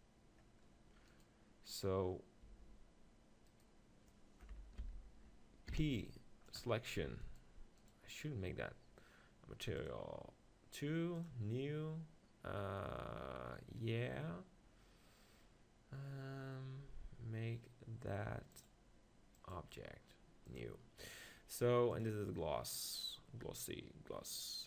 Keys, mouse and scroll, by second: 0.0 click, 0.7 middle click, 1.1-2.5 right drag, 2.7 Tab, 4.8 ctrl+l, 5.7 p, 7.0 Tab, 8.2-11.2 drag, 11.2-12.8 right drag, 12.8-15.4 drag, 19.5-24.6 drag.